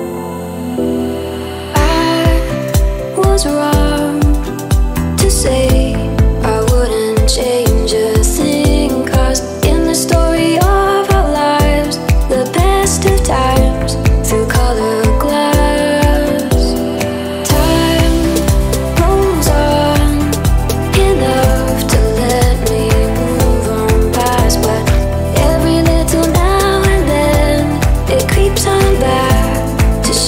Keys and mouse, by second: 0.5 ctrl+middle click, 1.0 Tab, 1.6 click, 2.8 s, 4.9 ctrl+r, 6.8 click, 7.6 s, 9.3 click, 10.0 g, 11.8 shift+middle click, 12.6 click, 13.2 s, 14.6 click, 17.0 Tab, 17.8 click, 18.4-20.2 drag, 20.2-21.4 middle drag, 21.4 click, 21.8-24.9 middle drag, 24.9 ctrl+a, 28.4 drag, 29.6-30.2 middle drag.